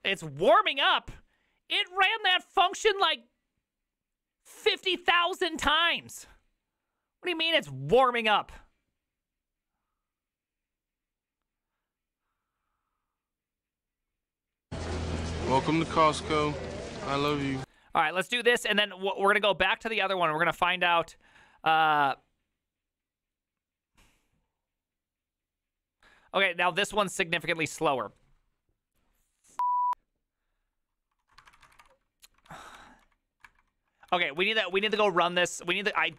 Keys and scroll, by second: 31.2-32.2 typing, 32.5 ctrl+d, 32.7 ctrl+d, 33.4 ctrl+^, 34.4 ctrl+h, 34.4 ctrl+t, 34.6-36.1 typing, 35.7 ctrl+c, 35.9 ctrl+c, 36.0 ctrl+:.